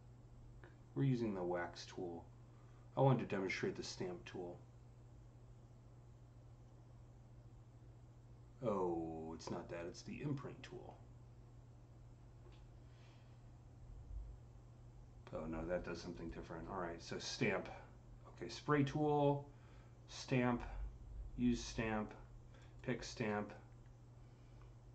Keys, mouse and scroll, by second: 15.9-18.5 drag, 19.9 click, 19.9-21.3 drag, 21.3 click, 22.4 click, 24.2 typing.